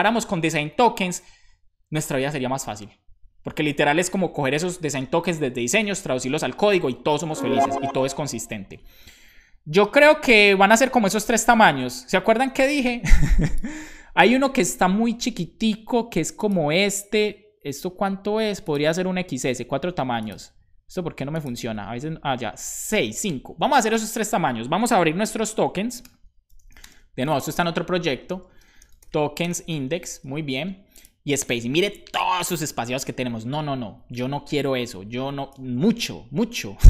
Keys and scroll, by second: 26.0 super+p, 26.2-27.3 typing, 28.6-30.0 typing.